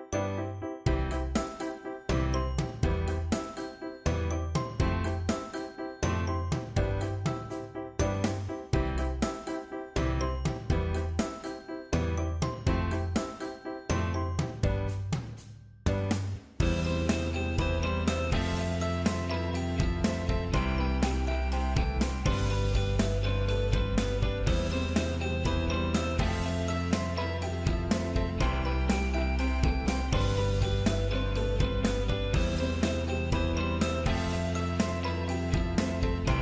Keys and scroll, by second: 25.3 ctrl+c, 28.0 ctrl+v.